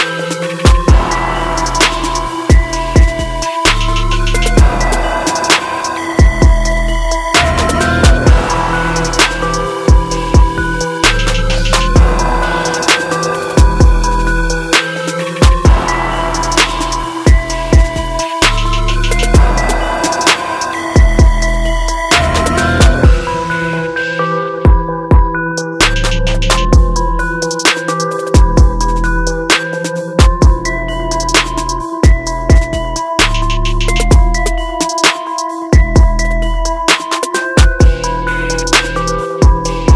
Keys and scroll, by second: 1.4 ctrl+=, 11.8 ctrl+alt+z, 13.9 ctrl+alt+z, 15.0 ctrl+alt+z, 15.7 ctrl+-, 18.4 ctrl+0, 19.0 ctrl+j, 23.0 ctrl+-, 24.8 ctrl+t, 32.8 ctrl+t, 37.3 ctrl+t.